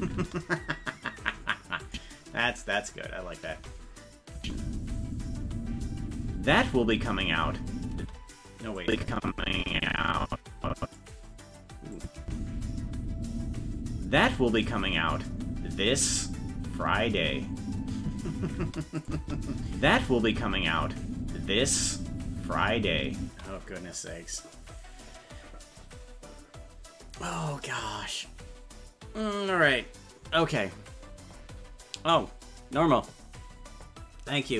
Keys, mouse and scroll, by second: 0.2 space, 1.9 click, 3.5 space, 8.8-11.0 drag, 12.0 click, 12.2 space, 18.6 space, 19.0 click, 19.2 space.